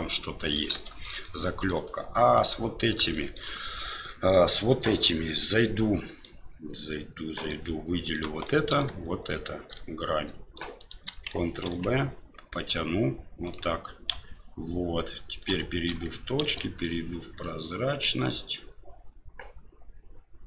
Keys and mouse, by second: 0.2 middle click, 0.8 shift+middle drag, 1.2-1.7 middle drag, 2.4 right click, 3.1 shift+middle drag, 4.1 middle click, 4.5 Tab, 5.3 middle click, 6.2-7.5 middle drag, 8.1 right click, 8.4 middle click, 9.7 middle click, 10.8 shift+right click, 11.6 ctrl+b, 14.1 KP_1, 15.5 1, 16.4 shift+z, 17.5-20.4 drag.